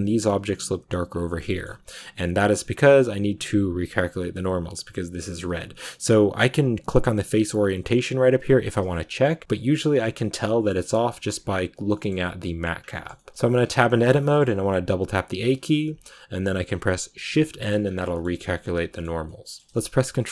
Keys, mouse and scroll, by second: 1.0 scroll down 2, 1.2-3.2 shift+middle drag, 3.2-7.5 drag, 9.4 click, 10.3 middle click, 10.8-11.8 scroll up 1, 11.8 middle click, 12.7 scroll down 2, 12.8 shift+middle click, 13.5 Tab, 14.1 middle click, 14.5 a, 15.9-17.2 scroll up 1, 17.2 shift+n, 17.7 scroll down 2, 17.9 middle click, 18.2 Tab, 18.3 middle click, 19.0 a, 19.1-20.3 middle drag.